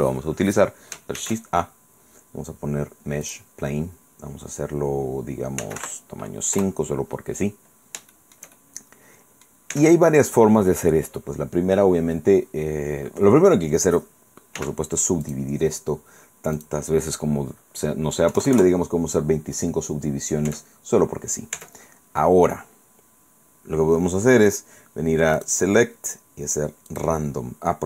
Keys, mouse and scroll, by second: 1.2 shift+a, 3.3 click, 5.4-6.3 typing, 6.6 Return, 7.3 scroll up 1, 7.7 scroll down 1, 7.7 middle click, 8.1 shift+click, 8.2-9.7 shift+middle drag, 9.7 Tab, 14.6 w, 15.3 click, 16.6 click, 18.3 KP_2, 18.5 KP_5, 18.6 KP_Enter, 20.5 Tab, 21.6 Tab, 25.4 click, 26.9 click.